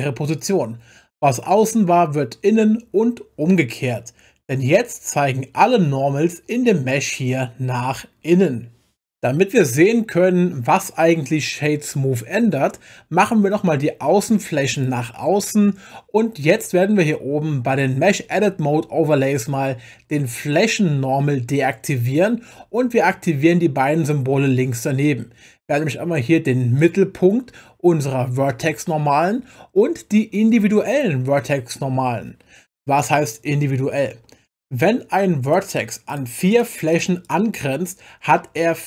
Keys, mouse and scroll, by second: 14.7 click, 35.4 click, 36.1 click, 36.5 click, 36.9 click, 37.2 click.